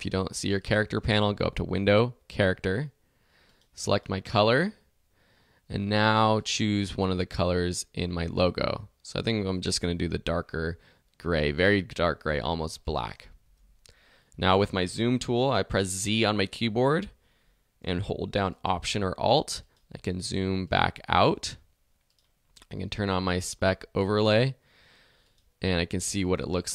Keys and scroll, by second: 13.6 alt+z, 26.0 alt+z.